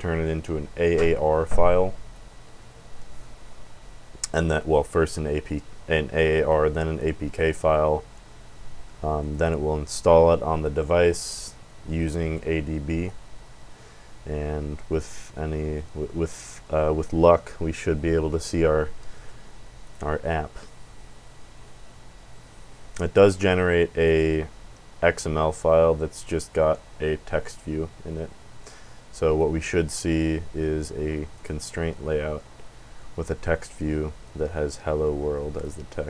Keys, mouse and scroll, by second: 9.2 click, 19.8 click, 24.0 click, 26.4-29.6 drag, 31.3 click, 34.2-35.6 drag.